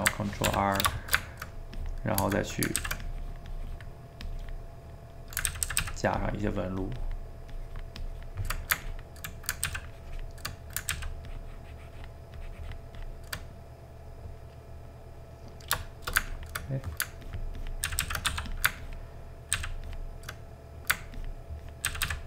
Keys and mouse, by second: 0.5 ctrl+r, 1.0 ctrl+shift+middle click, 1.8 click, 2.4 middle click, 2.8 ctrl+z, 3.1-4.8 drag, 4.8 middle click, 5.5 ctrl+z, 5.7 ctrl+z, 6.2-9.3 ctrl+drag, 9.3 middle click, 9.6 ctrl+z, 9.9 ctrl+click, 10.5 middle click, 10.9 ctrl+z, 11.3-13.5 ctrl+drag, 13.5-16.3 middle drag, 16.3 ctrl+click, 16.6 middle click, 17.3 ctrl+click, 17.9 ctrl+z, 18.1 ctrl+z, 18.3 f, 18.8 ctrl+click, 19.5 ctrl+z, 19.9 ctrl+click, 20.4 middle click, 21.2 ctrl+click, 21.9 ctrl+z, 22.0 ctrl+z.